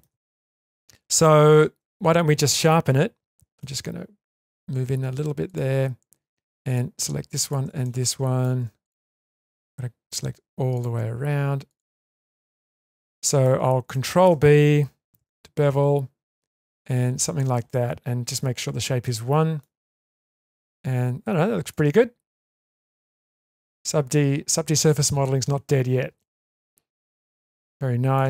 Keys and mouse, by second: 0.4 middle click, 1.7 Tab, 2.9 2, 3.6-4.4 ctrl+middle drag, 7.8-8.4 middle drag, 8.8 shift+click, 9.1-10.1 middle drag, 10.7 shift+click, 11.7 shift+click, 12.0-12.5 middle drag, 12.6 shift+middle click, 13.9-14.2 shift+middle drag, 15.1 ctrl+b, 19.0-19.6 middle drag, 19.9 Tab, 21.7-24.1 middle drag, 26.2-26.6 shift+middle drag, 27.2-28.1 ctrl+middle drag.